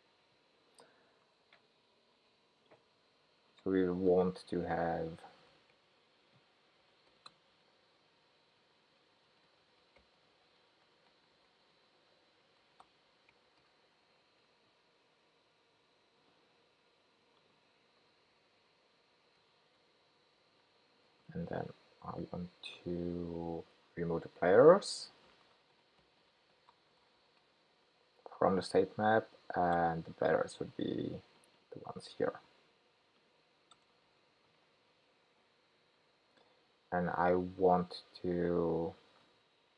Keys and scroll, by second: 18.3 Tab, 19.7 Tab, 19.8 ctrl+k, 32.2 super+c, 34.1 super+v.